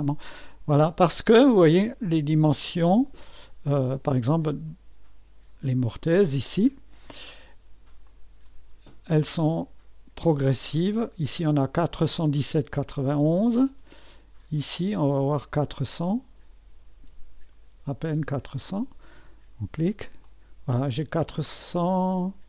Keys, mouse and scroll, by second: 0.5 click, 2.6 click, 4.7 BackSpace, 5.7 click, 8.0-11.2 drag, 12.8-16.0 middle drag, 16.0-17.2 drag, 18.8 click, 20.3 click, 22.2 click.